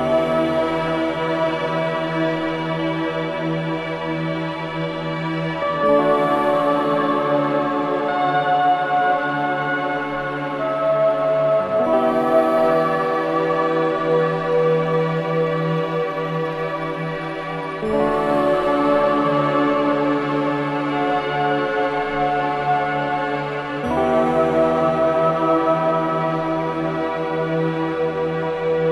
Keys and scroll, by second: 0.5 shift+i, 2.0 3, 9.8 ctrl+z, 22.9 4, 26.8 2.